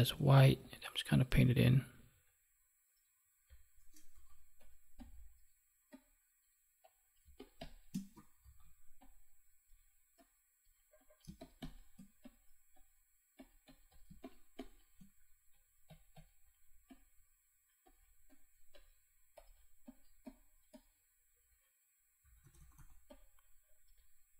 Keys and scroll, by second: 4.1 ctrl+z, 7.2 space, 8.3 ctrl+z, 11.2 space, 14.0 space.